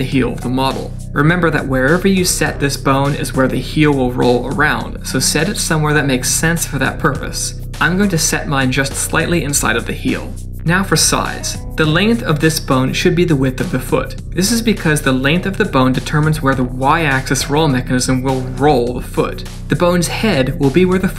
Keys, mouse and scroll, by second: 0.2-0.6 scroll up 2, 0.8 shift+middle click, 1.9 g, 4.8 scroll up 3, 5.3 shift+middle click, 6.8 g, 10.8 middle click, 18.0 click, 19.1 click.